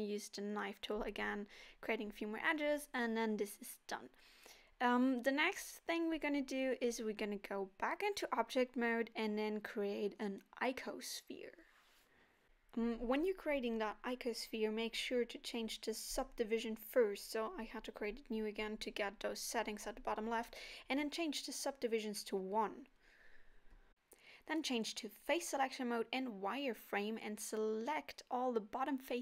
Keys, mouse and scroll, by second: 0.5 click, 1.0 middle click, 2.3 middle click, 2.6 middle click, 2.8 scroll up 2, 3.1 scroll down 1, 3.5 shift+a, 3.5 Tab, 4.0 middle click, 4.8 shift+a, 7.3-7.8 scroll down 3, 7.7 middle click, 9.2 z, 11.4 KP_1, 12.7 Tab, 14.7 Tab, 15.7 x, 16.5 shift+a, 19.3 click, 21.3 Tab, 23.0 click, 23.8 click, 25.1 x, 27.4 middle click.